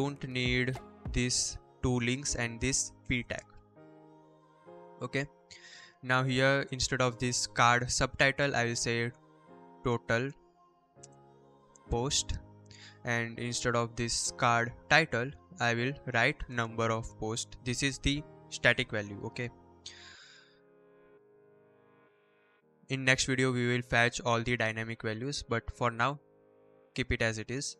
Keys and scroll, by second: 2.8 BackSpace, 4.3 Up, 4.7 Down, 5.5 l, 6.2 shift+Left, 7.3 shift+Right, 8.2-12.1 typing, 15.4-17.1 typing, 17.5 ctrl+s, 22.5 BackSpace, 22.7 ctrl+s.